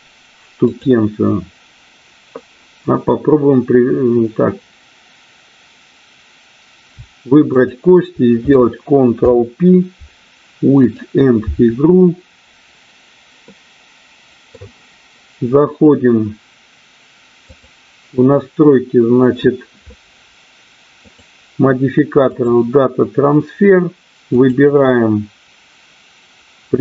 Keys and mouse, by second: 0.6 click, 7.5 shift+click, 9.3 ctrl+p, 13.4 middle click, 17.4 click, 21.0 click, 24.3 click.